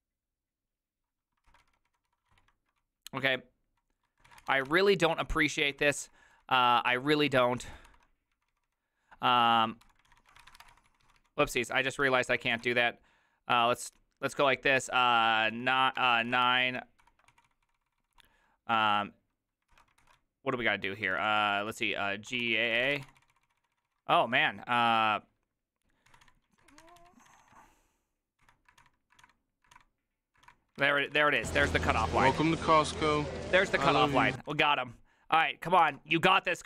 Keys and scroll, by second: 1.7 ctrl+c, 1.7-8.9 typing, 9.9-13.4 typing, 10.1 ctrl+a, 10.2 ctrl+a, 12.3 ctrl+c, 14.5-24.0 typing, 16.5 ctrl+c, 17.0 ctrl+v, 19.7 ctrl+c, 20.0 ctrl+v, 22.5 ctrl+a, 22.6 ctrl+a, 25.9-35.1 typing, 32.2 ctrl+c, 32.3 ctrl+:, 35.9 Tab, 35.9 Return.